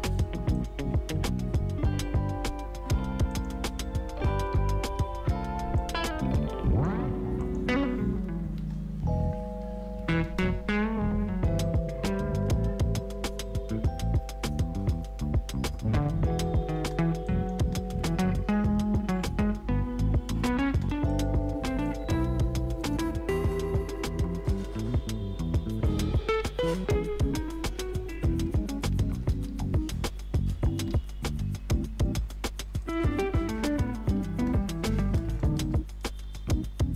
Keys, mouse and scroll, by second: 0.5 click, 3.3 click, 3.9-5.4 typing, 5.7-7.4 drag, 7.7 space, 10.2 space, 16.8 space, 17.2 click, 17.6 space, 20.6 space, 21.1 click, 23.5 right click, 24.5 click, 27.7 ctrl+n, 28.8-31.8 typing, 32.8 click, 36.2 Return.